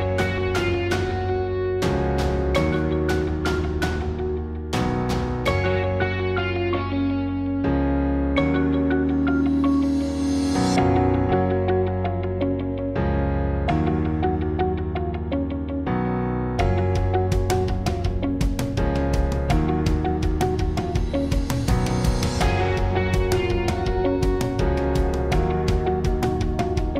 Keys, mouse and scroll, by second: 0.0-1.8 typing, 0.4 click, 4.0 KP_1, 4.8 KP_1, 4.8 KP_3, 7.0 ctrl+e, 7.2 click, 8.0 click, 8.5 ctrl+e, 8.5 ctrl+r, 11.0 ctrl+e, 12.1 click, 12.5 ctrl+r, 13.6-15.9 drag, 16.1 ctrl+r, 18.5 click, 18.8 Tab, 20.9-22.1 drag, 24.0 Tab, 25.3 z.